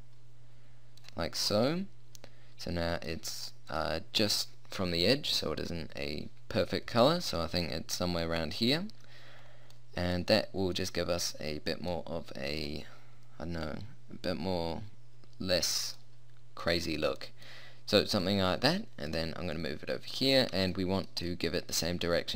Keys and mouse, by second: 2.0 middle click, 2.2 middle click, 2.6-6.0 middle drag, 7.2-9.8 middle drag, 10.2 middle click, 11.0 middle click, 11.4 middle click, 11.6-16.2 middle drag, 16.2 middle click, 16.4 middle click, 18.2-20.2 drag, 20.8 middle click.